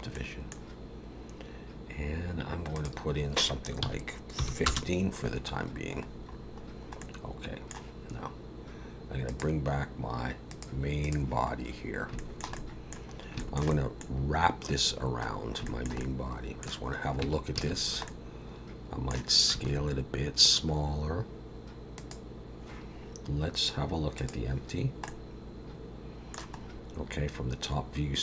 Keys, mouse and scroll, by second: 0.1 middle click, 2.0-2.7 scroll down 1, 2.7 click, 5.6-7.0 scroll down 10, 7.0 middle click, 9.3 click, 10.5 click, 11.0 click, 11.5-12.1 scroll up 1, 12.1 scroll up 1, 12.2 shift+middle click, 12.5 middle click, 13.1 scroll up 2, 13.4 shift+middle click, 13.7 middle click, 15.3 scroll down 2, 15.6 shift+middle click, 16.0 middle click, 17.2 Tab, 17.6 a, 18.1 middle click, 19.6 s, 24.2 click, 25.0 middle click, 26.7 scroll up 2.